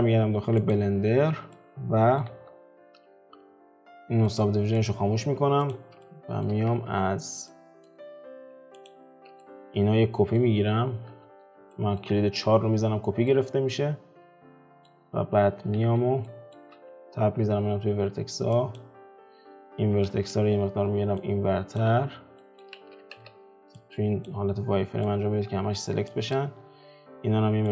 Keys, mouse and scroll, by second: 0.0-0.8 shift+middle drag, 0.8 click, 1.2 alt+q, 1.6-2.4 middle drag, 2.4 alt+q, 4.5 click, 5.3 scroll up 3, 5.8 click, 6.1-7.0 shift+middle drag, 7.0 Tab, 7.5-8.9 middle drag, 8.9 alt+shift+click, 9.4-11.2 middle drag, 11.2 4, 11.8 middle click, 12.5 Tab, 13.3-15.2 middle drag, 15.2 alt+q, 15.8 alt+q, 16.3-17.6 middle drag, 17.6 Tab, 18.0-18.8 scroll down 2, 18.8 click, 20.2 shift+space, 21.3 click, 22.4 middle click, 22.8 ctrl+z, 23.4 z, 24.3 click, 25.2 click, 26.4 click, 26.6-27.7 scroll down 3.